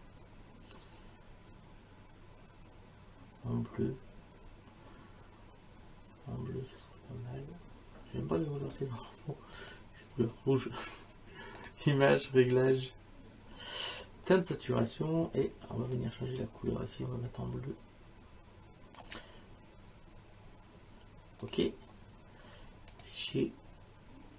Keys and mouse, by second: 9.6 click, 11.6 click, 13.9 click, 16.0 click, 21.4 click, 22.9 click.